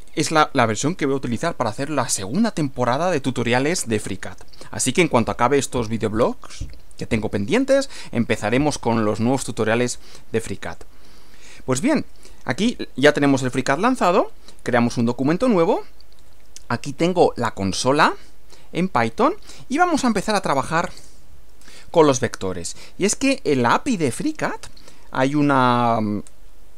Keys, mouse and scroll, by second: 10.7 click, 15.1 click, 20.2 click, 21.0 Return.